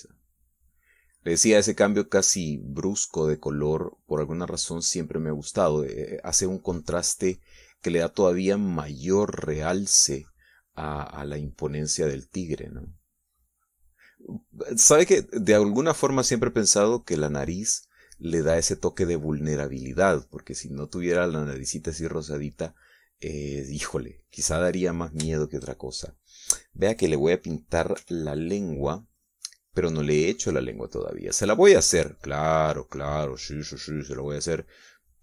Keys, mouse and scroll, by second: 1.3 click, 2.3 middle click, 3.1-6.5 drag, 6.8 middle click, 7.5-12.0 drag, 12.1-17.1 drag, 17.1 middle click, 17.8-20.8 drag, 20.9 middle click, 21.6-24.5 drag, 24.5 middle click, 26.1 middle click, 26.6 shift+middle click, 29.4 f, 30.0 click, 31.3-35.2 drag.